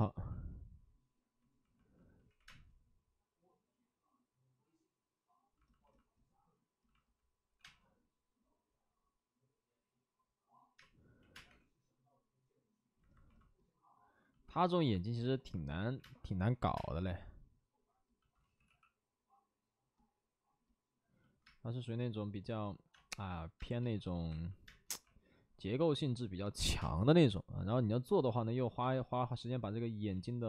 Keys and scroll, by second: 2.3 3, 2.4 space, 7.4 5, 7.5 space, 10.7-11.9 typing, 15.9 space, 15.9 3, 16.3 3, 16.7 space, 18.4 ctrl+z, 18.6 x, 21.4 space, 22.9-24.8 typing, 26.4-27.2 typing, 28.7 space, 28.7 3, 30.0 ctrl+z.